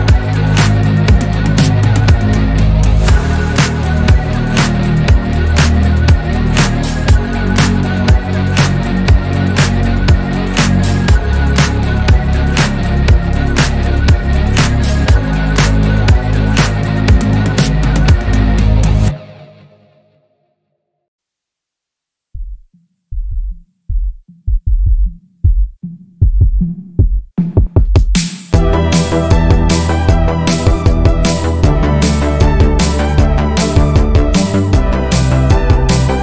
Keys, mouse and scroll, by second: 0.3 shift+click, 1.4-1.8 scroll up 1, 1.8 click, 2.3 scroll down 3, 2.8-3.4 middle drag, 3.4 click, 4.8 KP_7, 5.6 x, 7.6 s, 9.2 scroll down 2, 9.3-10.3 middle drag, 10.3 scroll up 4, 10.9 KP_1, 11.5-12.2 scroll up 1, 12.2-13.6 shift+middle drag, 13.6 Tab, 14.6 alt+z, 14.9 click, 15.4 scroll down 1, 15.7-16.7 shift+middle drag, 16.7-17.2 scroll up 1, 17.2 r, 19.4-20.8 scroll up 2, 20.8 scroll up 1, 21.0 s, 28.3 scroll down 4, 28.6 shift+middle click, 29.0 scroll up 1, 29.3 shift+middle click, 30.0 g, 30.9 r, 31.8 scroll down 2, 32.0 shift+middle click, 32.4-33.1 scroll up 1, 33.1 e.